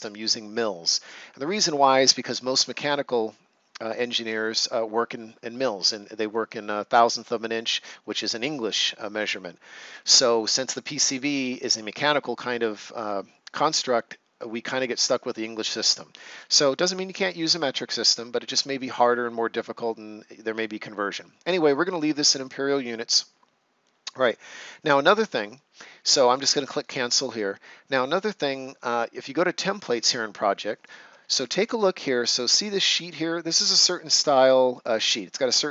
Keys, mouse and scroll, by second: 24.2 click, 26.7 click, 30.8 click, 31.2-31.6 ctrl+scroll down 1, 31.8 right click.